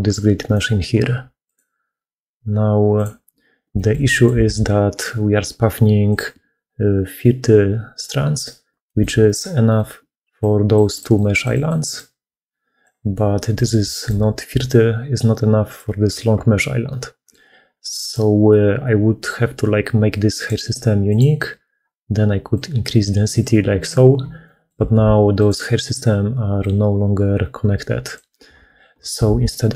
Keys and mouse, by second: 0.3 click, 1.3-3.0 drag, 3.6 shift+middle click, 3.9 middle click, 4.4 alt+a, 8.7 shift+click, 9.2 click, 9.5 click, 9.8-13.4 d, 11.0 click, 13.0 click, 13.8 shift+click, 13.8 shift+middle click, 14.3-17.2 d, 16.8 click, 17.9-21.1 drag, 17.9 d, 22.4-23.8 drag, 24.3 click, 24.3 middle click, 24.8 alt+a, 25.3-28.0 drag, 28.6 ctrl+z, 29.0 ctrl+z, 29.2 ctrl+z.